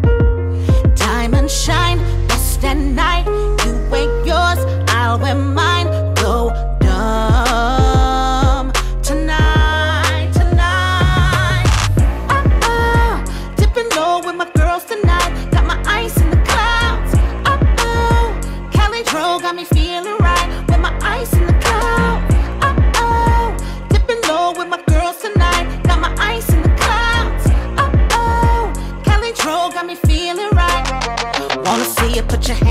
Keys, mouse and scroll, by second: 0.4 click, 1.8-2.7 typing, 3.5-4.1 click, 4.0 space, 7.1 space, 7.7-8.4 click, 8.3 space, 10.9 space, 12.6 click, 13.4 shift+click, 14.3 ctrl+c, 15.2-15.9 click, 17.7 ctrl+v, 19.1 u, 19.8-23.4 drag, 30.5 ctrl+z, 31.7-32.7 drag.